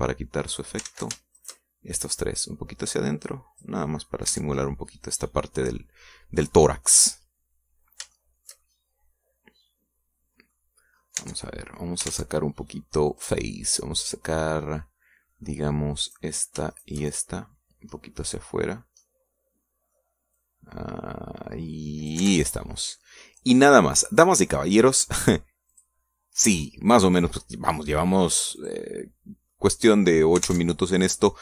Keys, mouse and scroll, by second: 0.9 click, 1.9 ctrl+z, 2.5 ctrl+shift+right click, 3.5-4.9 drag, 4.9 middle click, 5.4 Tab, 5.7-7.1 middle drag, 7.2 scroll down 1, 7.6-7.9 scroll up 1, 8.1 scroll down 2, 8.9 scroll down 3, 9.2-11.8 shift+middle drag, 12.0-12.3 scroll up 2, 12.3 Tab, 12.5 middle click, 13.1 ctrl+Tab, 14.2 click, 17.2 right click, 17.8 shift+right click, 19.0 middle click, 20.1-21.2 middle drag, 21.4-23.4 drag, 23.3 Tab, 23.6 scroll down 1, 23.9 middle click, 25.2 middle click, 26.8 click, 27.5 click, 28.3-28.7 scroll down 1, 28.7 middle click, 29.1-29.7 scroll down 1, 29.7 click.